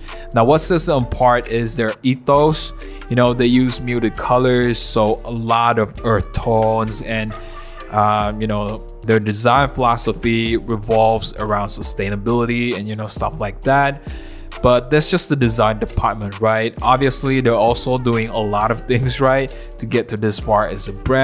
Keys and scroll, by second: 0.2 super+z, 2.1-3.9 typing, 6.1-8.4 typing, 8.9 super+d, 9.2 super+Tab, 9.7-12.8 typing, 11.0 super+t, 11.2 Return, 12.0 super+z, 12.7 super+z, 13.4 super+z, 18.0 ], 18.1 [, 18.2 [, 20.3 v, 21.0 super+0, 21.1 super+-.